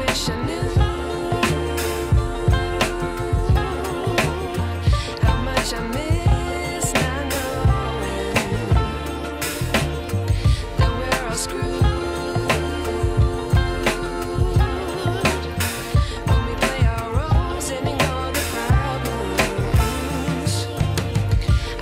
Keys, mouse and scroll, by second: 4.8-5.5 scroll down 2, 6.2 shift+a, 8.6 ctrl+alt+KP_0, 10.1 s, 13.0-13.3 scroll down 3, 13.9 ctrl+alt+KP_0, 14.6 click, 15.3 scroll up 4, 15.5 middle click, 15.8 scroll down 3, 16.1-16.8 middle drag, 16.8 KP_1, 17.3 scroll up 3, 17.6 scroll down 2, 18.3 ctrl+alt+KP_0, 19.6 v.